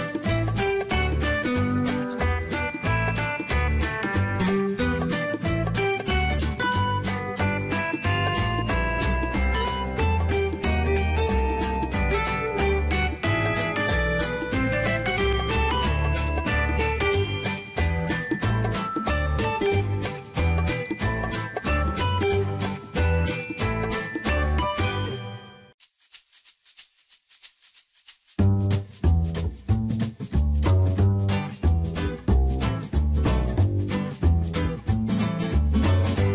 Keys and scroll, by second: 5.4-6.5 typing, 12.5 Delete, 12.8 Return.